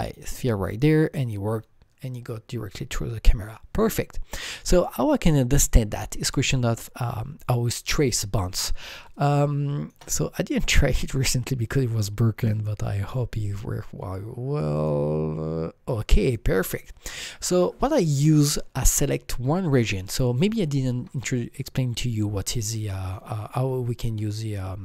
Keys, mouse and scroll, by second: 4.0 click, 4.1-5.0 scroll down 5, 5.0-5.9 scroll up 5, 5.9-8.5 scroll up 5, 9.1 shift+Num_Lock, 9.1-13.5 shift+right drag, 9.1 scroll up 1, 10.8 click, 14.7 click, 14.7-17.4 shift+right drag, 14.7 scroll up 1, 14.7 click, 18.9 click, 18.9 shift+right click, 18.9-19.6 scroll up 3, 19.6 click, 22.8 click, 22.8 scroll up 1.